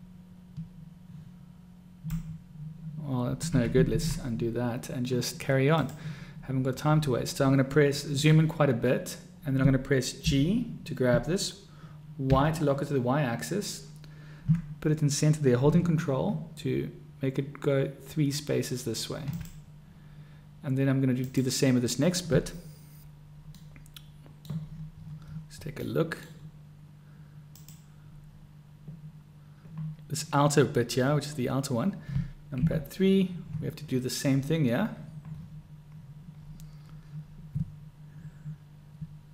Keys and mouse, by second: 4.1 ctrl+z, 5.9 click, 10.4 g, 23.7-24.5 drag, 24.5 middle click, 26.0-26.4 middle drag, 27.6 click, 32.6 KP_3.